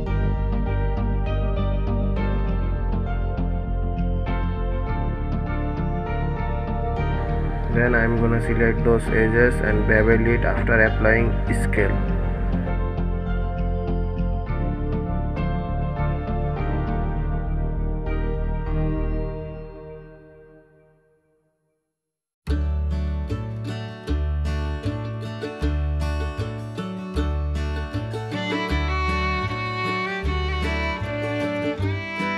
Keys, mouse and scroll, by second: 0.6-3.1 middle drag, 3.1 Tab, 3.7 Tab, 4.8 ctrl+a, 6.6 Tab, 8.2 ctrl+b, 13.2 click, 14.1 KP_1, 15.0-15.4 scroll down 2, 16.7 Tab, 17.8 g, 21.0 click, 22.6 click, 23.3 Tab, 23.9-24.3 scroll up 1, 24.7 click, 25.5 g, 28.7 click, 29.0 Tab, 29.4-29.8 scroll down 4.